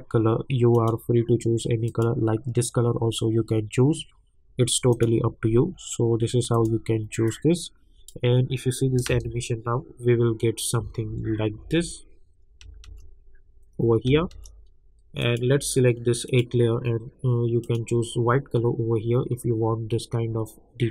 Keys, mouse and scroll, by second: 0.7 click, 5.1-9.0 drag, 9.0 space, 15.2 click.